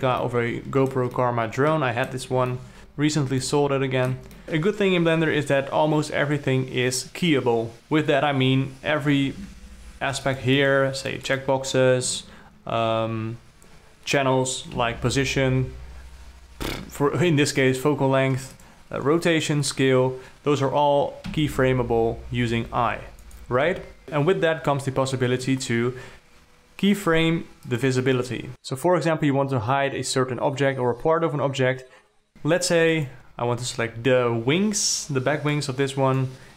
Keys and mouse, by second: 0.7-1.4 alt+middle drag, 1.6-2.5 alt+middle drag, 2.8 alt+middle drag, 3.9 ctrl+middle click, 4.4 g, 9.9 alt+a, 10.7 click, 11.0 click, 11.5 click, 11.7 click, 15.2 n, 19.0 click, 21.7 i, 23.0 i, 23.7 click, 28.2 click, 28.5-33.5 middle drag, 33.5-36.5 drag.